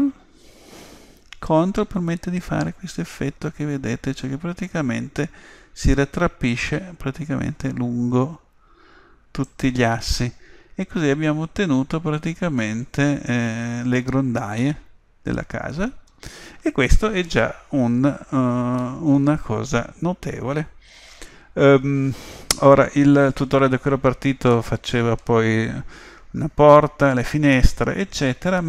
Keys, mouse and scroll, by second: 10.2-16.8 middle drag, 18.0 a, 18.8-20.8 middle drag, 24.5-26.4 middle drag, 27.6-28.6 middle drag.